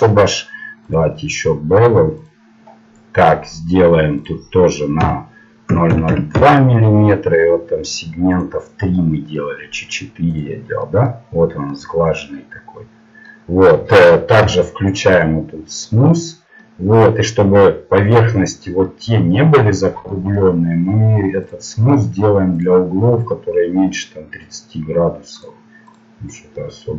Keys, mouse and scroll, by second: 2.2 click, 3.0 middle click, 6.3 KP_0, 7.9-11.9 drag, 9.1-13.2 middle drag, 14.7 t, 16.1-18.3 drag, 16.7 middle click, 18.3-22.5 middle drag, 22.5-23.7 drag, 26.5-26.9 middle drag.